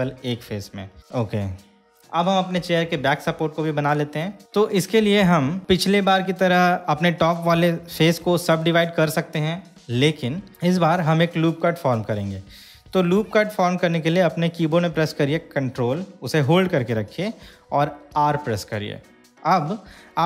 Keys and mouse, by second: 1.3 middle click, 8.1 3, 8.5 click, 18.4 ctrl+r.